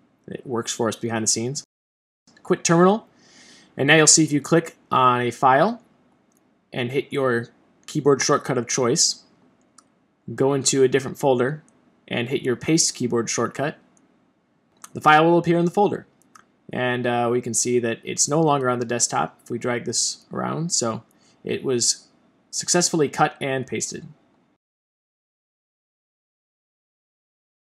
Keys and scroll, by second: 0.3 Return, 0.4 super+q, 4.5 shift+super+x, 6.1 shift+super+x, 12.7 shift+super+v.